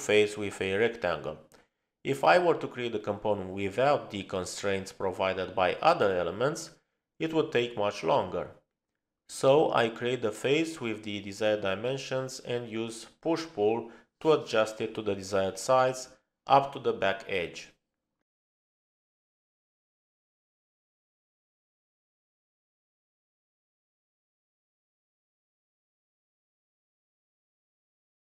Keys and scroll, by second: 25.3-28.2 typing.